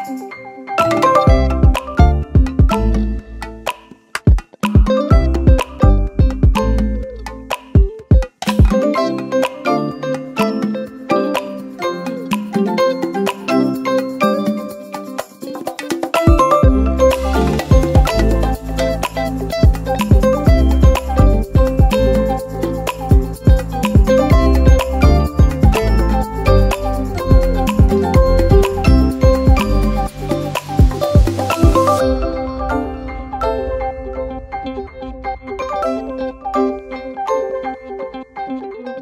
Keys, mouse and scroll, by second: 0.3 Caps_Lock, 1.8 space, 2.2 ctrl+v, 4.9-6.8 shift+drag, 9.5 alt+shift+click, 11.1 ctrl+d, 11.3 ctrl+d, 11.5 ctrl+d, 11.6 ctrl+d, 11.7 ctrl+d, 11.9 ctrl+d, 12.0 ctrl+d, 12.1 ctrl+d, 12.3 ctrl+d, 12.5 ctrl+d, 12.8 ctrl+d, 13.1 ctrl+d, 16.2 ctrl+g.